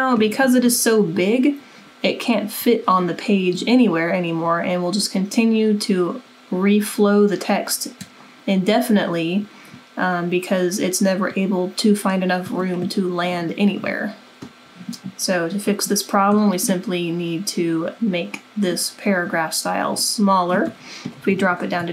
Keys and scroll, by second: 20.9-21.8 typing.